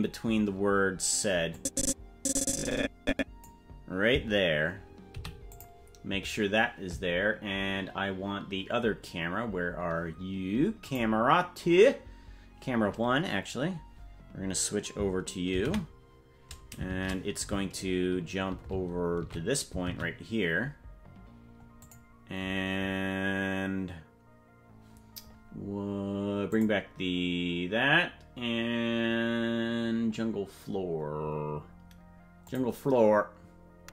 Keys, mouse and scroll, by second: 1.5-3.5 drag, 5.1 i, 10.8 click, 15.5 ctrl+b, 26.8 click, 30.8-33.9 scroll down 8.